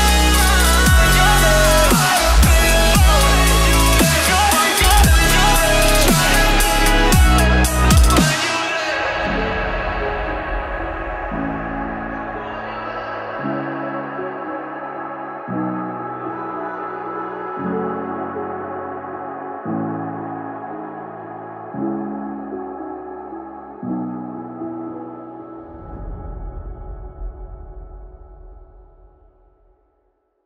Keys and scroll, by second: 4.5-8.7 typing, 10.0-11.5 typing, 12.7-13.6 typing.